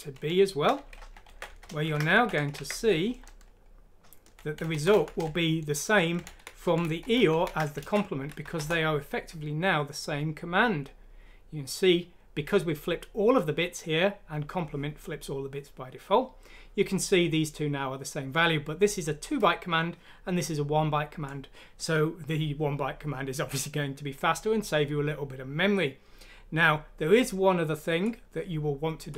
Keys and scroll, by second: 1.5 Down, 1.9 End, 3.6 Left, 3.6 Left, 4.0-6.3 typing, 8.4 F6, 8.6 Return.